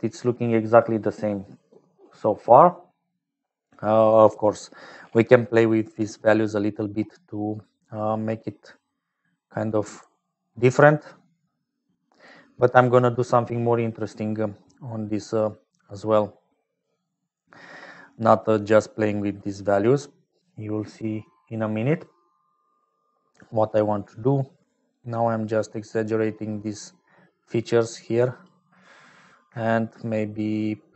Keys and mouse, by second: 0.0-30.9 typing, 5.5 middle click, 6.0 middle click, 7.9-9.4 drag, 10.0 middle click, 12.0 click, 13.6 middle click, 15.6-16.7 drag, 18.5-20.0 drag, 24.3-28.5 drag, 30.2-30.9 shift+drag.